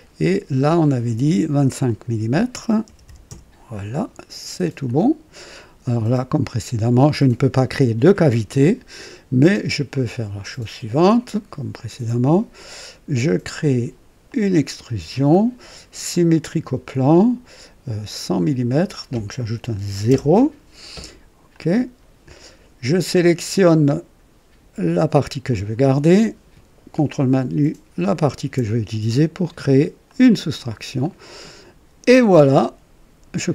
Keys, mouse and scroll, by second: 0.7 click, 1.8 click, 2.8 KP_2, 3.0 KP_5, 3.2 Return, 4.3 typing, 4.8 click, 5.8 click, 9.8 click, 11.1 click, 14.2 click, 16.0 click, 18.2 click, 20.1 alt+KP_0, 21.4 click, 25.4 click, 28.0 ctrl+click, 30.0 click, 31.0-33.5 drag.